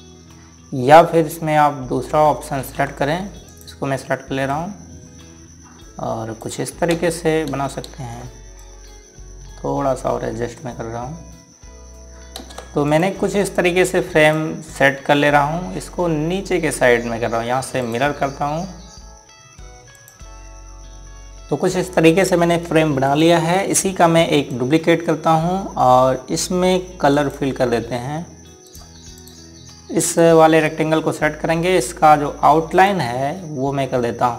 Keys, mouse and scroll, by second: 3.1 ctrl+Num_Lock, 3.4 ctrl+z, 4.2 click, 7.7 ctrl+space, 9.4 click, 13.1 space, 13.6 click, 18.6 click, 24.5 scroll up 1, 25.3 click, 27.9 right click, 29.4 click, 33.5 click.